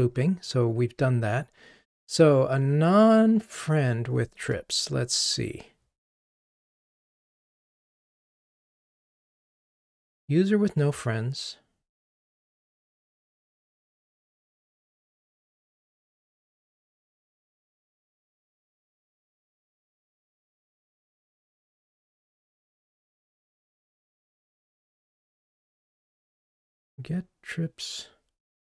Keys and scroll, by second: 4.5 ctrl+Tab.